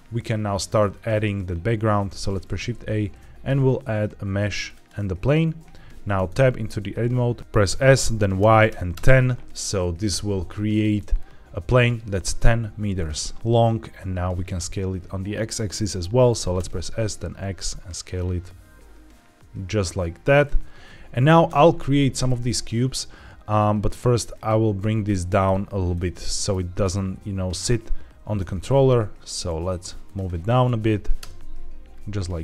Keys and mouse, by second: 2.2 shift+a, 6.0 Tab, 7.6 s, 8.3 y, 8.6 KP_1, 8.8 KP_0, 10.0 KP_Enter, 16.2 s, 16.4 x, 20.2 click, 21.4 Tab, 24.2 click, 24.9 middle drag, 25.8-26.4 middle drag, 28.3 g, 28.5 z, 29.9-31.1 drag, 31.1 KP_0.